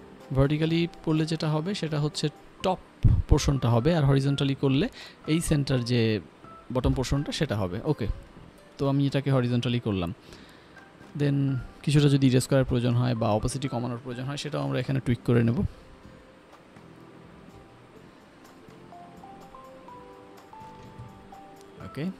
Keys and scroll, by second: 6.9 Return, 8.4-9.3 typing, 17.2 ctrl+z, 19.4 ctrl+s.